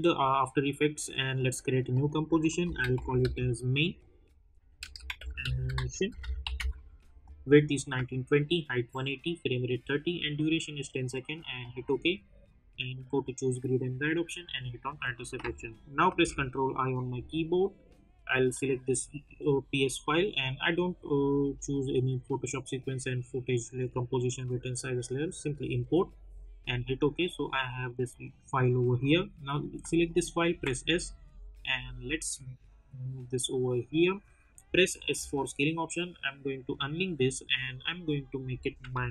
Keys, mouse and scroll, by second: 0.3 click, 2.4-3.6 typing, 4.8-7.0 typing, 11.5 click, 16.1 ctrl+i, 18.4 click, 23.7 click, 28.9-30.5 drag, 30.5 s, 31.0-34.6 drag, 34.6 s, 35.1 s, 36.4 click.